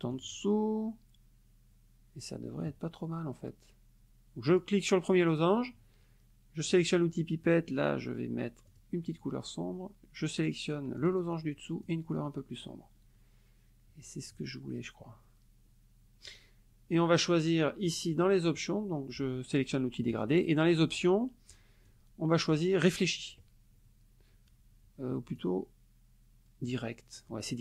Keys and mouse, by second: 0.1 click, 4.5 click, 6.7 click, 8.7 click, 11.0 click, 11.8 click, 17.9 click, 21.9-23.1 drag, 25.4-26.9 drag.